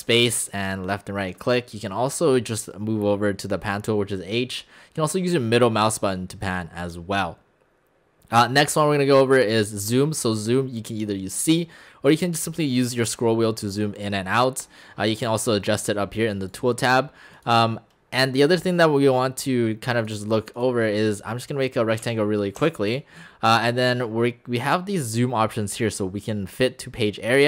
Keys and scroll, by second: 22.0 v, 22.6 x.